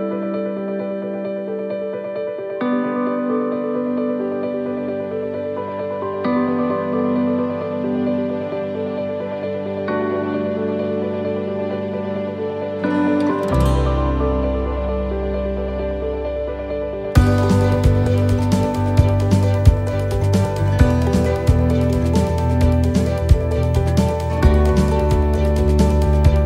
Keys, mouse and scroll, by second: 3.4 click, 5.5 right click, 6.8 click, 8.8 right click, 9.7 click, 12.0 right click, 13.2 click, 15.8 right click, 16.2 right click, 18.0 right click, 19.4 click, 21.6 click, 23.7 right click, 24.8 click, 24.8 scroll down 1.